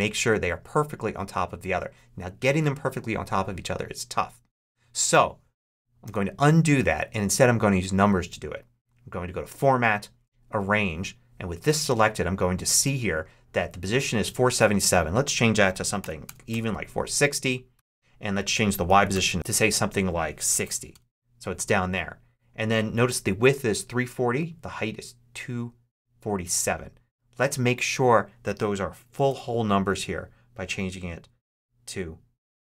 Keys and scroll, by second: 5.9 super+z, 15.6-16.9 typing, 17.6 Tab, 18.7-21.0 typing, 28.6-29.6 typing, 29.7 Tab, 31.4-32.7 typing.